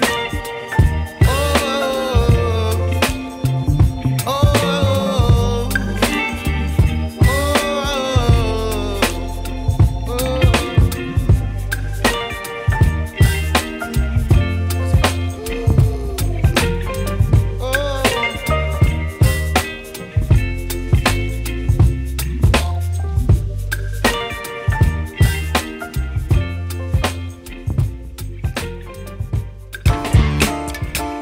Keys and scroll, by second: 5.6 F2, 11.2 Escape, 11.5 F4, 14.3 e, 15.9 Escape, 16.4 alt+v, 16.5 alt+s, 17.1 Escape, 18.3 alt+v, 18.4 alt+e, 22.9 F2, 27.6 Escape, 30.5 Escape.